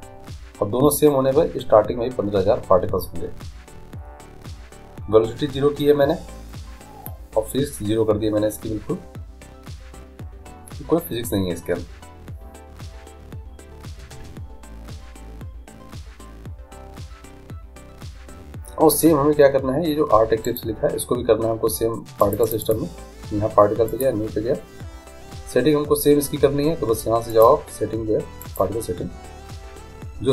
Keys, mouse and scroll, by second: 2.5-6.5 scroll down 1, 6.5-20.4 scroll down 1, 20.4-22.3 right drag, 22.3-25.6 drag, 27.3-29.1 drag.